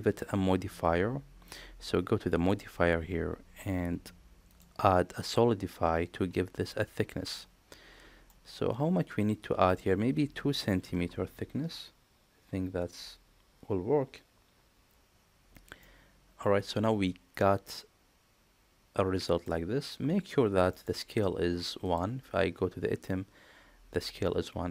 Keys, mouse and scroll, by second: 2.4 click, 4.4-6.7 drag, 7.2-8.2 middle drag, 9.6-14.9 drag, 15.7-19.3 middle drag, 20.6 middle click, 21.7 click.